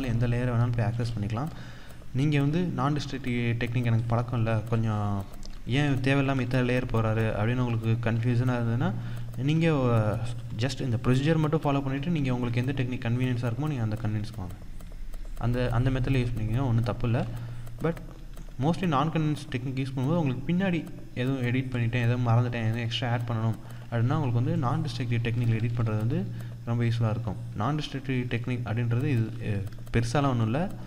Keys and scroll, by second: 24.0 ctrl+-, 27.1 ctrl+-, 28.6 ctrl+=, 28.8 ctrl+space, 29.6 ctrl+=.